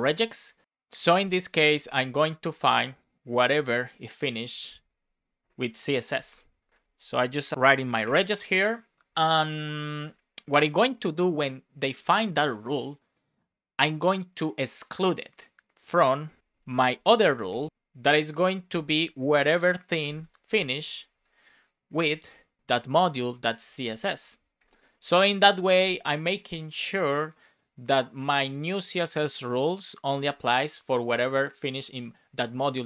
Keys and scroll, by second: 1.7 space, 2.0 Left, 4.4 shift+\, 5.3 BackSpace, 6.7 BackSpace, 8.0 shift+4, 9.0 Right, 9.9 Down, 16.9 BackSpace, 17.9 space, 20.4 space, 20.9 Left, 24.5 shift+4, 25.3 Right, 25.6 Return.